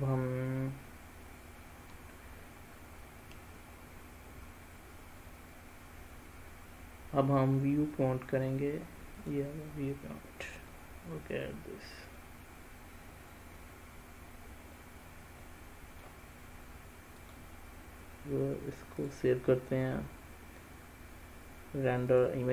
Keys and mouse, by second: 9.6 click, 11.1-11.8 middle drag, 12.5-16.4 middle drag, 17.5 drag, 19.2-22.5 drag.